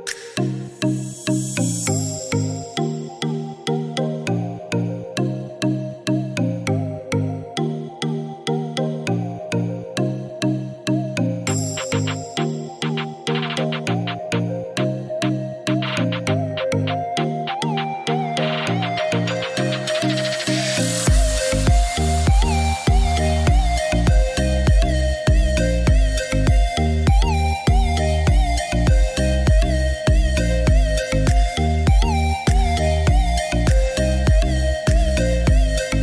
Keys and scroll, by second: 13.3 Escape, 28.0 0, 28.8 5, 29.3 Return, 30.8 Escape.